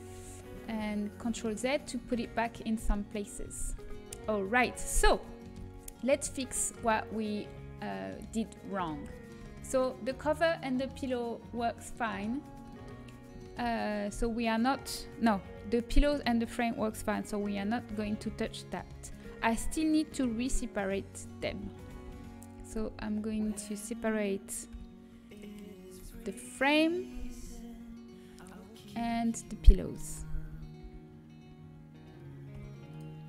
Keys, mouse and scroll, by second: 0.0 click, 0.6 ctrl+z, 3.7 Tab, 5.7 a, 6.8-12.2 middle drag, 12.4 middle click, 18.0 l, 18.2 l, 19.7 a, 21.4 l, 21.8 l, 22.5 l, 23.2 l, 25.1 p, 26.0 Tab, 27.8 h, 28.7-30.6 right drag, 29.0 Tab, 30.6 l, 33.1 l, 33.1 p.